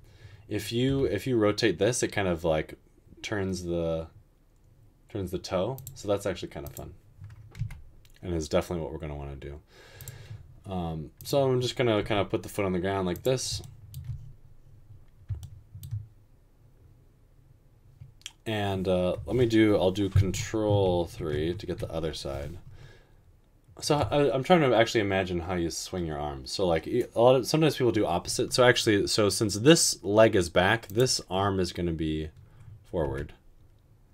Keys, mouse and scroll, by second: 1.1 r, 7.8 g, 12.2 g, 33.2 typing.